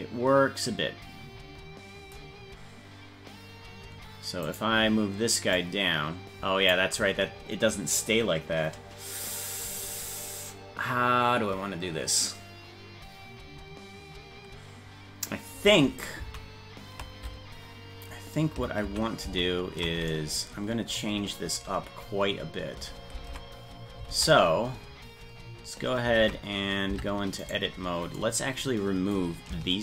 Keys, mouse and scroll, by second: 4.5 right click, 5.6-6.8 drag, 16.4 ctrl+z, 18.9 ctrl+z, 19.4 ctrl+z, 23.2 ctrl+Tab, 24.1 ctrl+Tab, 26.2 ctrl+Tab, 26.9 Tab, 27.5 right click.